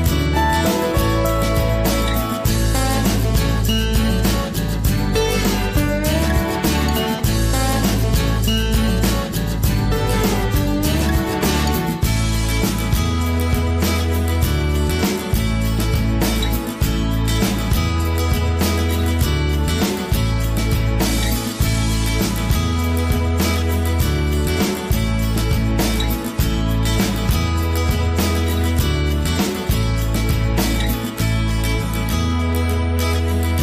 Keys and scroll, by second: 23.6 ctrl+g, 24.7 ctrl+c, 24.9 ctrl+v.